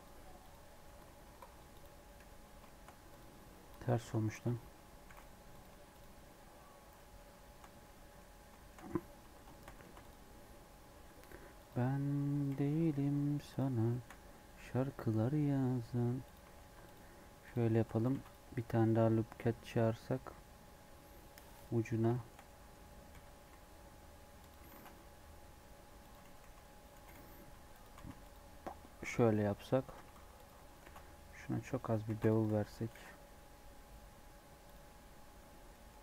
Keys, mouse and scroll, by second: 1.9 scroll down 1, 2.0 middle click, 2.3 scroll up 1, 2.6 shift+middle click, 3.0 click, 3.6 Tab, 4.3 a, 5.6 alt+n, 5.6 Tab, 5.9 click, 6.1 scroll down 2, 6.2 middle click, 6.9-8.8 middle drag, 8.8-9.4 scroll up 3, 9.2 Tab, 9.4 shift+middle click, 9.8 ctrl+r, 12.4 g, 13.8 shift+middle click, 14.0 scroll up 1, 14.5 3, 16.2 alt+click, 16.6 alt+e, 17.6 shift+middle click, 18.0 ctrl+r, 21.8 scroll up 3, 22.0-23.0 shift+middle drag, 23.0 g, 24.6 ctrl+b, 26.2 g, 26.9 g, 27.9 alt+e, 29.1 Tab, 29.5 middle click, 29.6 Tab, 29.8 scroll up 1, 29.9 2, 30.3 alt+click, 30.8 ctrl+b, 31.8 Tab, 32.0 ctrl+a, 32.4 Tab, 32.8 ctrl+b, 34.7 Tab, 34.9-35.6 scroll down 8, 35.6 middle click.